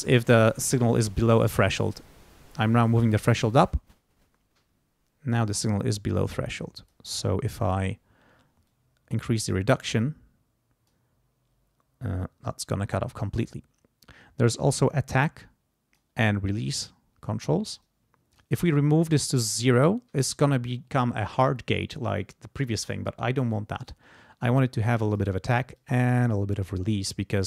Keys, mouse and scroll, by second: 2.0-7.1 drag, 8.7-11.1 drag, 14.8-16.1 drag, 16.7 click, 17.8 click, 19.0 click, 19.8 click, 22.8-25.4 drag, 25.8-27.4 drag.